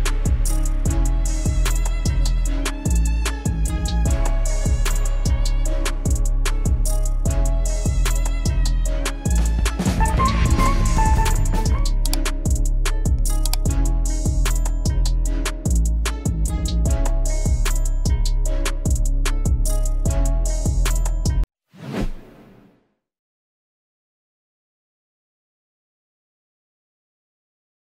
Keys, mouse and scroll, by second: 1.3 click, 6.7-7.3 drag, 7.3 click, 8.3 click, 13.9 Return.